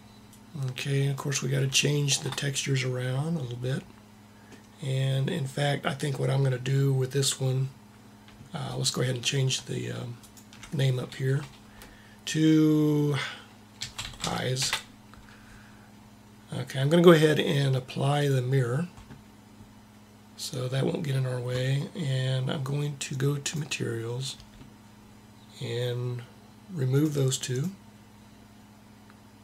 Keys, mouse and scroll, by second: 0.0-1.5 drag, 1.5 middle click, 18.0-19.8 drag, 23.1-25.0 drag, 26.8-29.0 drag.